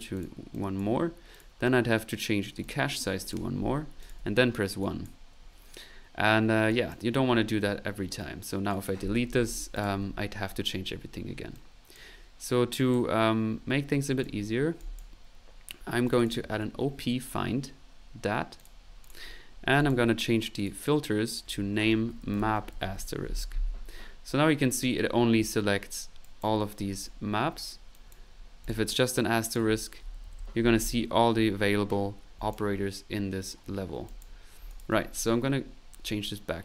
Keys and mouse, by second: 0.5 click, 1.3 click, 2.6 click, 4.0 click, 4.2 typing, 4.8 click, 5.3 typing, 6.3 middle click, 6.7 click, 8.2 right click, 8.9 typing, 9.2-14.1 Delete, 9.7 click, 11.5 click, 12.7 click, 13.5 middle click, 14.2 click, 14.9 click, 15.8-17.0 typing, 16.0 click, 17.2 click, 18.6 click, 19.0 click, 19.4 middle click, 19.8 click, 20.2 click, 20.6 click, 21.2 click, 24.2 middle click, 25.2 middle click, 26.2 click, 26.7 right click, 27.9 click, 28.3 middle click, 28.6 click, 29.4 click, 31.8 middle click, 32.4 click, 34.0 click, 34.7 ctrl+click, 34.9 ctrl+z, 35.6 ctrl+middle click.